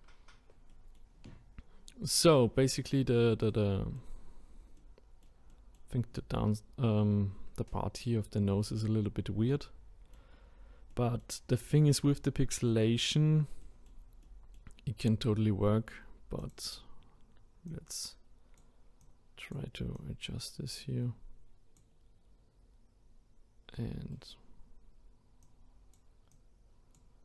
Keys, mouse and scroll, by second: 0.3-0.7 scroll down 1, 0.7-1.3 middle drag, 1.3-1.9 scroll up 2, 1.9-2.4 middle drag, 2.4-2.8 scroll up 1, 2.8-4.4 middle drag, 4.4-4.8 scroll up 1, 4.8-8.5 middle drag, 9.6-10.5 middle drag, 10.5-10.9 scroll down 1, 10.9-14.9 middle drag, 14.9-16.4 scroll up 1, 16.4-22.9 drag, 23.8-25.4 middle drag, 25.4-27.2 drag.